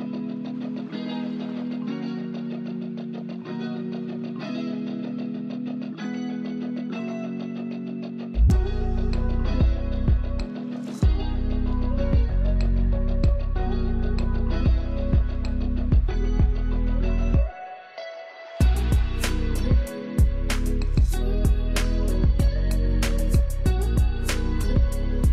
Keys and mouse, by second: 4.4-8.8 drag, 10.2 ctrl+space, 10.4 ctrl+click, 10.6 ctrl+space, 12.6 ctrl+space, 13.8 click, 16.9-25.3 drag.